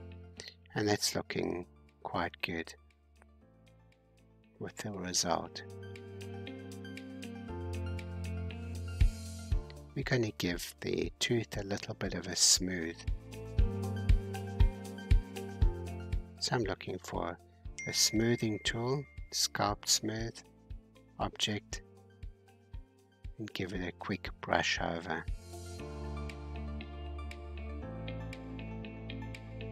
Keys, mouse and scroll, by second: 0.0 scroll up 3, 1.2 click, 1.5 g, 4.4 scroll down 3, 5.9 Tab, 7.2-10.5 shift+middle drag, 10.5 scroll up 2, 13.5-15.2 drag, 13.5-15.2 middle drag, 13.5-15.2 right drag, 13.5-16.5 scroll down 23, 17.1-17.5 scroll down 1, 20.2-21.4 drag, 21.4-22.8 middle drag, 22.8-23.7 scroll up 2, 23.7-27.3 drag, 27.3-28.3 middle drag, 28.3-29.7 drag.